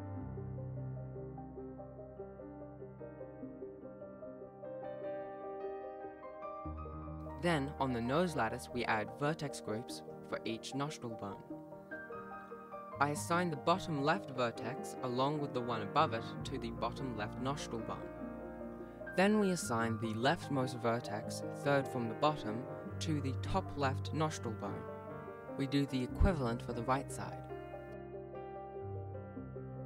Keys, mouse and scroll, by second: 17.1 click, 17.1 scroll down 1, 17.2 click, 18.0 Right, 18.3 ctrl+s, 18.3 scroll up 1, 18.3 shift+middle click, 18.4 b, 19.0 click, 19.0 click, 19.2 click, 19.8 alt+a, 20.1 click, 20.1 b, 20.3 alt+a, 20.5 click, 20.6 click, 20.7 click, 21.2 alt+a, 21.2 b, 21.5-21.9 click, 21.6 alt+a, 21.6 click, 21.8 click, 21.8 b, 22.0 Right, 22.0 ctrl+s, 22.0 scroll up 1, 22.1 shift+middle click, 22.2 b, 22.8 click, 23.0 click, 23.9 alt+a, 23.9 click, 23.9 b, 24.1 alt+a, 24.3 click, 24.9 alt+a, 25.0 b, 25.3 click, 25.4 click, 25.5 alt+a, 25.5 b, 25.7 click, 27.0 alt+a, 27.1 b, 28.0 alt+a, 28.0 b, 28.1 click, 28.3 alt+a, 28.6 ctrl+s, 29.0 click, 29.4 ctrl+Tab.